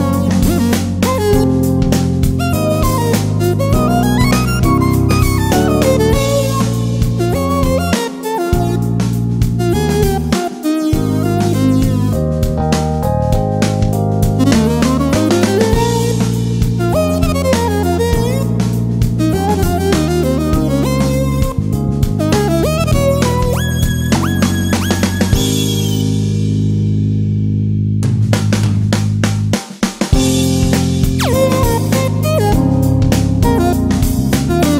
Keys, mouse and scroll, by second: 13.5 click, 15.1-15.5 alt+scroll up 1, 16.7 alt+scroll down 1, 19.2-25.5 drag, 27.9 alt+scroll up 1, 32.0 click, 33.5 click.